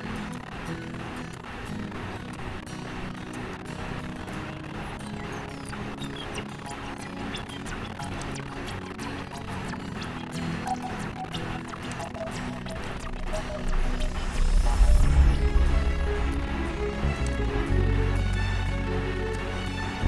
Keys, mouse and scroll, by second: 3.6 click, 10.7 click, 12.3 click, 14.2 l, 17.7 click.